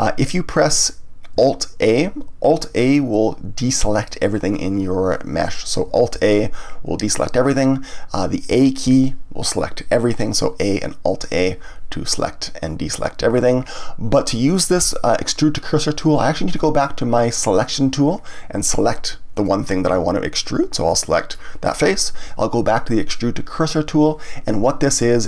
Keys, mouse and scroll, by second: 6.1 alt+a, 17.5 click, 19.3 click, 20.9-23.6 middle drag, 23.6 click.